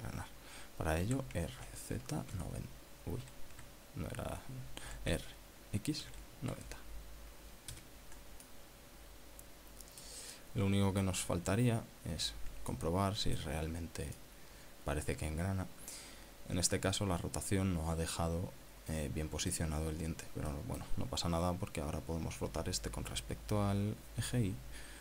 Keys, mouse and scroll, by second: 2.1 r, 2.6 z, 3.3 KP_9, 4.6 Escape, 6.0 r, 7.1 x, 7.6 KP_9, 7.8 KP_0, 8.8 KP_Enter, 9.6-11.3 drag, 11.4-12.3 middle drag, 12.3-12.6 scroll up 1, 12.8 scroll down 1, 13.8-14.7 shift+middle drag, 14.7-15.1 scroll up 1, 15.2-20.8 middle drag, 21.0-21.6 scroll down 4, 21.6 middle click, 22.1 scroll up 2.